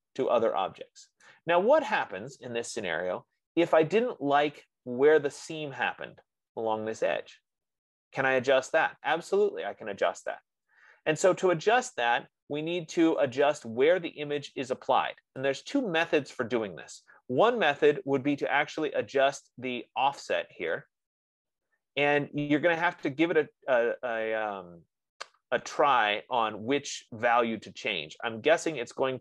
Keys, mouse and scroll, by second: 1.5 right click, 2.7-3.1 scroll, 4.2-5.1 scroll, 11.5-12.1 scroll, 13.7 click, 16.1 click.